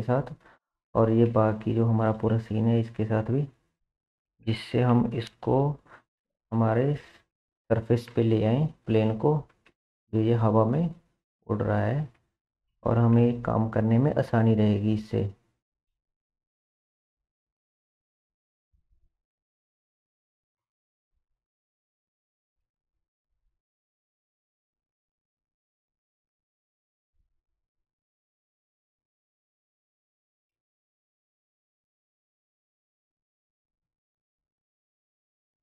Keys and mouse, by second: 1.5-3.3 shift+drag, 4.1 shift+click, 4.9 ctrl+p, 8.5 KP_1, 9.0 KP_3, 11.0 r, 14.0 r, 16.0 shift+z, 17.3 r, 20.6 KP_1, 23.0 r, 30.5 KP_3, 32.4-33.2 shift+middle drag, 33.2 r.